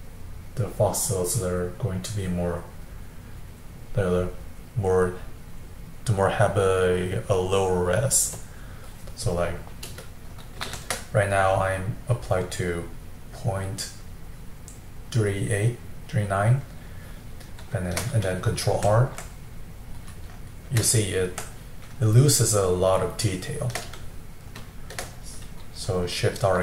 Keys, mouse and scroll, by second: 10.7 shift+r, 16.8-18.8 middle drag, 18.8 ctrl+r, 19.6-26.6 middle drag.